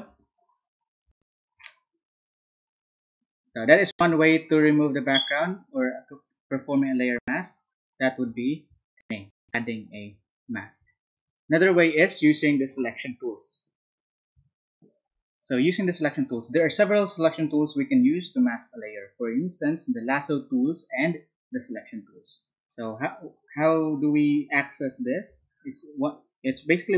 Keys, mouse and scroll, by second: 0.0 alt+Tab, 12.1 Down, 25.5 alt+Tab.